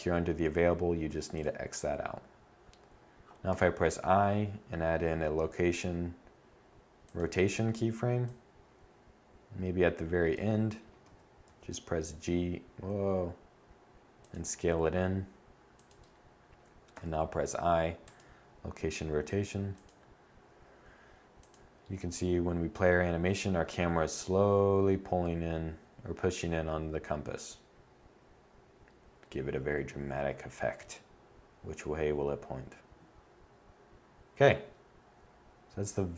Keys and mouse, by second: 2.9 i, 7.7 click, 10.4 g, 14.2 g, 16.3 i, 35.9-36.1 drag.